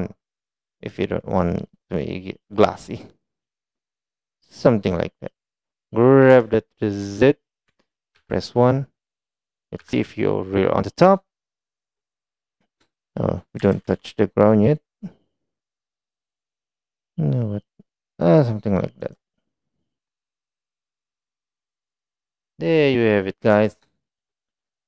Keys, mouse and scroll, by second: 2.8 click, 7.5 click, 12.4 KP_1, 13.9-14.6 shift+middle drag, 15.7 shift+middle click, 16.4 g, 21.9 click, 22.5-23.0 middle drag.